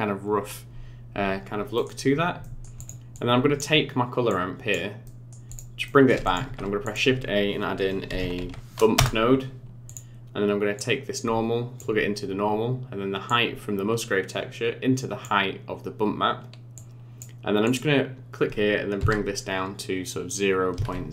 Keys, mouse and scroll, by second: 1.7 middle click, 1.8-2.2 scroll down 5, 2.4 middle click, 2.7 click, 3.1 click, 4.3 click, 5.0 middle click, 5.5 click, 5.8 middle click, 6.2 click, 6.4 shift+a, 10.7 click, 13.2 click, 16.7 click, 17.6 click.